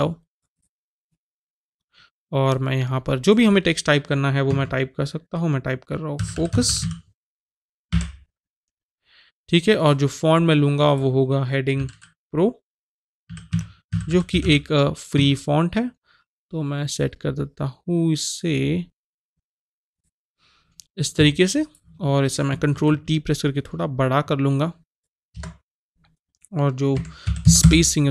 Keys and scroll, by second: 4.5 Caps_Lock, 5.9-7.3 typing, 11.8 h, 13.0-14.9 typing, 15.2 Caps_Lock, 22.8 ctrl+t, 25.4 Return, 26.9 KP_Subtract, 27.2 KP_2, 27.4 KP_0, 27.6 Return.